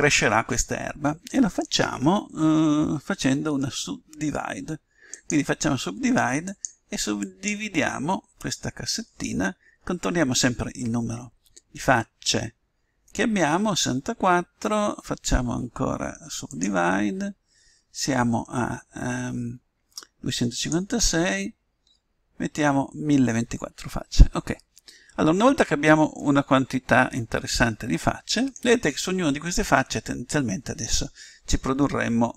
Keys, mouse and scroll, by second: 5.0-9.0 drag, 16.5-18.4 drag, 20.5-22.3 drag, 24.6-28.0 middle drag.